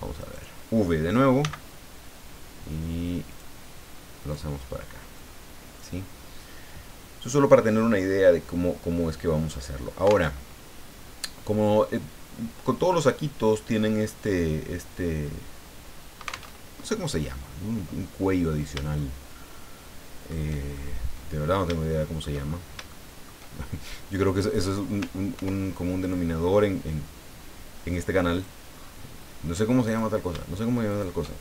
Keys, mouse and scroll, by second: 0.2 right click, 1.4 v, 3.3 click, 4.2 right click, 5.2 click, 10.2 alt+Tab, 16.5 alt+Tab, 19.0-20.4 shift+middle drag, 20.7 shift+scroll up 2, 21.2 scroll down 2, 21.8 shift+middle click, 22.4 shift+scroll down 2, 22.9 shift+middle click, 25.3 ctrl+r, 26.0 click, 28.3 click, 28.8-29.1 scroll up 1, 29.8 right click, 30.9 shift+right click.